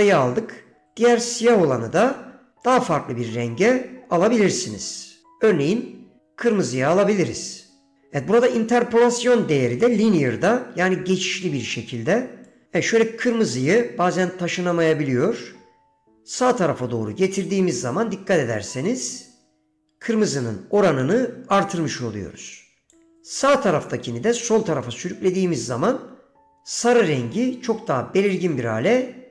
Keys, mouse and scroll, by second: 2.2 click, 12.7-13.8 drag, 15.1-23.1 drag, 24.0-29.3 drag.